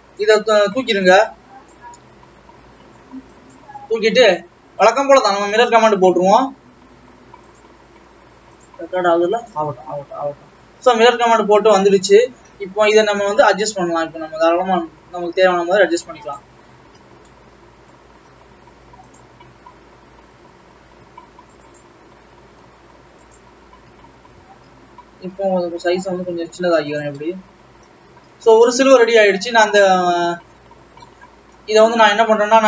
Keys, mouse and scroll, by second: 1.8 click, 2.4 x, 5.9 click, 8.0 click, 12.0-12.9 scroll up 3, 12.9 click, 14.3 g, 16.6-17.3 scroll down 1, 17.3-17.8 scroll down 3, 17.8 middle click, 18.3-19.8 scroll up 2, 19.8 click, 22.8 alt+a, 23.5 click, 24.4 a, 25.5 s, 27.5-29.1 middle drag, 29.1 Tab, 30.6-31.0 scroll up 4, 31.0 scroll down 3, 31.3 middle click, 31.8 scroll up 1.